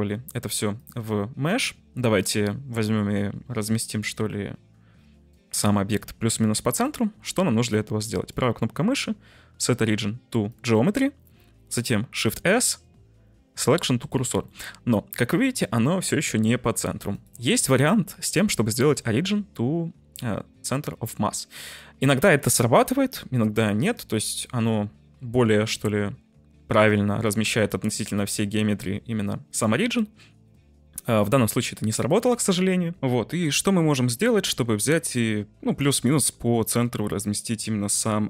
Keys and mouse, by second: 0.8 click, 6.8 middle click, 8.2-10.6 right drag, 12.1 shift+s, 14.4 shift+middle click, 17.2-21.9 right drag, 31.0 Tab, 31.7 Tab, 31.9 Tab, 32.2 a, 33.0 ctrl+shift+F1, 35.1-35.6 middle drag.